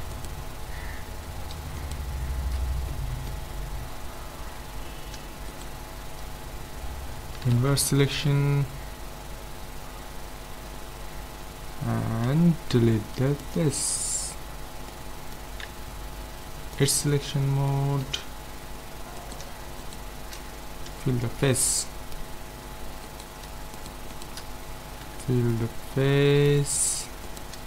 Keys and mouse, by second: 2.9 middle click, 3.1 right click, 3.5-5.5 middle drag, 5.5-7.2 right drag, 7.4 ctrl+i, 12.3 x, 14.9 middle click, 15.6 ctrl+Tab, 20.9 f, 21.4 middle click, 23.1 middle click, 23.4-25.5 right drag, 25.1 f, 25.5-27.6 middle drag.